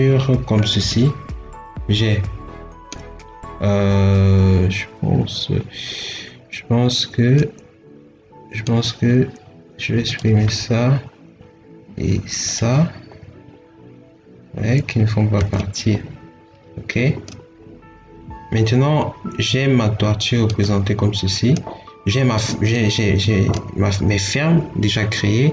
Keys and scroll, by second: 15.2 ctrl+x.